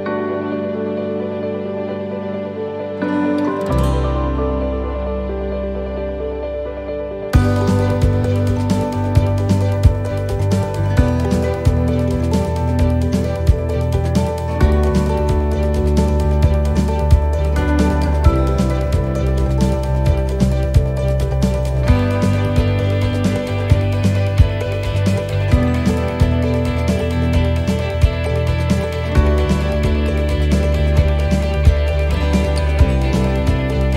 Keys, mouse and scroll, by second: 0.3 scroll down 3, 0.5 shift+middle click, 0.9-1.7 scroll down 1, 3.1 click, 4.5 click, 6.2 click, 7.3 click, 10.3 click, 11.4 middle click, 14.4 shift+middle click, 15.3 shift+middle click, 16.1 scroll up 1, 16.6 scroll up 2, 16.7 shift+middle click, 17.6 right click, 18.7 l, 19.2 middle click, 19.7 scroll down 2, 20.7-22.2 l, 22.7 l, 24.0 middle click, 25.2-25.6 scroll down 4, 27.3-28.5 scroll up 5, 28.2 middle click, 28.9-29.6 scroll up 1, 30.0 right click, 31.1 l, 32.6 right click, 33.2 alt+shift+right click.